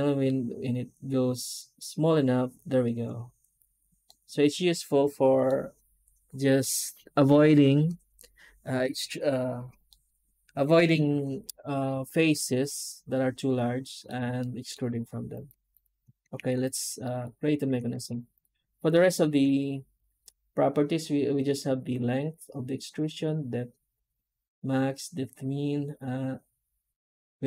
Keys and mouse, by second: 3.9-5.3 middle drag, 9.8-13.9 middle drag, 14.3 shift+middle drag, 15.2 right click, 15.7 x, 16.3 alt+h, 16.5-16.9 drag, 16.9 middle drag, 17.0 middle click, 17.2 Tab.